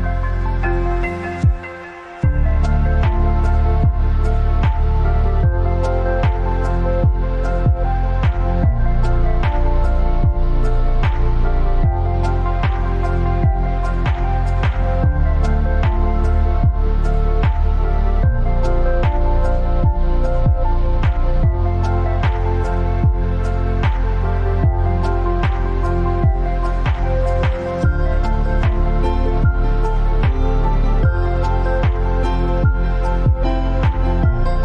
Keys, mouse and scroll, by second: 1.8 click, 5.1-6.3 scroll up 1, 6.3 Return, 7.7 click, 8.3-8.6 scroll up 1, 8.6 Return, 10.2 click, 14.3 click, 14.3 alt+scroll up 1, 15.3 space, 15.4 click, 15.8 space, 17.2 click, 18.3-19.5 alt+drag, 20.3 t, 20.8 click, 23.4 click, 29.1 click, 29.8-32.9 typing.